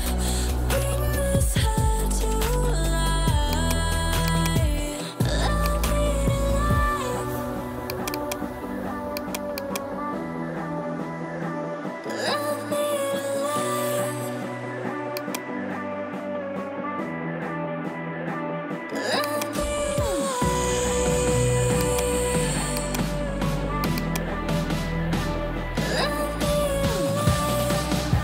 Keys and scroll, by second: 1.4 7, 24.6-25.8 typing.